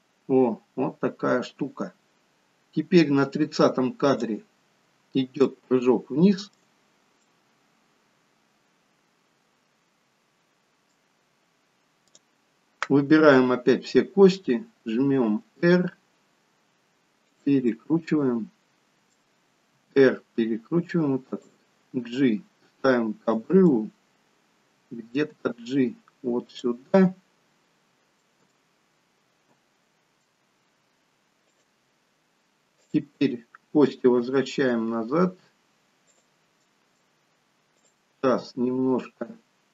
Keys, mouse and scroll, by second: 5.5 shift+middle click, 7.3 middle click, 12.1 click, 13.7 scroll up 2, 15.5 r, 17.8 middle click, 19.9 r, 22.0 g, 23.8 middle click, 25.5 g, 27.0 middle click, 28.5 g, 33.0 click, 34.3 r, 36.8 middle click, 37.8 click, 38.3 r.